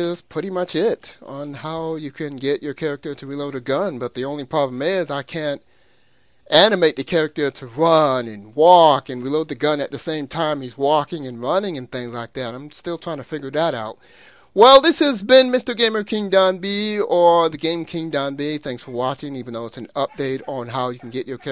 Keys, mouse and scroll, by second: 1.0 Left, 2.0-3.9 middle drag, 4.8-6.7 middle drag, 17.0-18.9 middle drag, 20.8-21.5 middle drag.